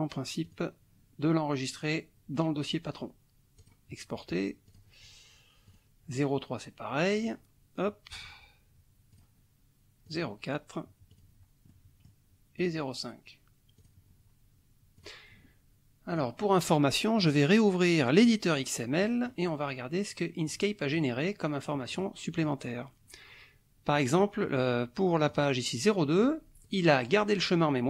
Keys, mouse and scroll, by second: 0.5 click, 3.6 click, 4.7 click, 5.7 click, 7.1 click, 8.1 click, 9.1 click, 10.1 click, 11.1 click, 11.7 middle click, 12.6 click, 13.8 click, 15.0 click, 16.1 click, 17.2 click, 18.2 click, 19.0 click, 20.5 click, 22.0 click, 24.2 middle click, 25.3 click, 26.6 click.